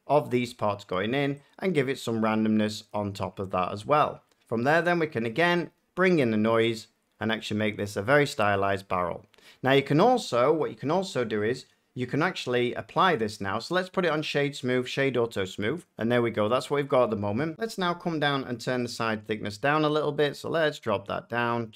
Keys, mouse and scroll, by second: 0.3 click, 2.8 click, 8.1 shift+click, 14.1 click, 14.7 click, 16.5-16.8 middle drag, 16.9 middle drag, 17.1 F9.